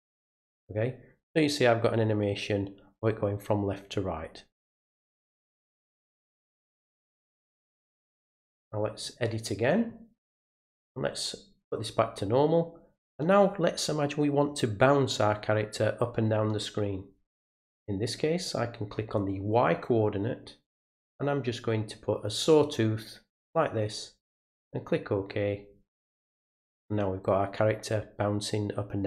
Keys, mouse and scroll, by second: 0.5 click, 7.6 right click, 9.0 click, 10.8 click, 18.5 click, 22.1 click, 24.5 click, 26.0 click.